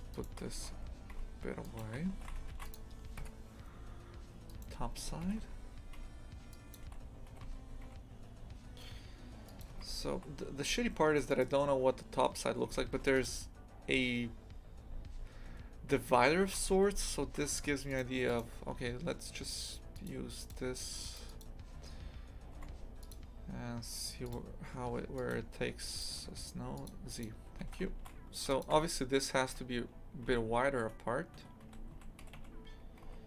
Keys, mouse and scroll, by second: 0.1 shift+right click, 0.6 g, 1.8 shift+f, 3.2 KP_7, 4.5 right click, 5.3 g, 6.7 shift+click, 7.3 g, 9.7 shift+f, 12.7 shift+f, 18.3 right click, 23.1-27.6 drag, 27.6 shift+f, 28.7 Tab, 29.4 a, 30.2 a, 30.8 Tab, 31.4 Tab, 31.6 a, 31.9 a, 32.2 g.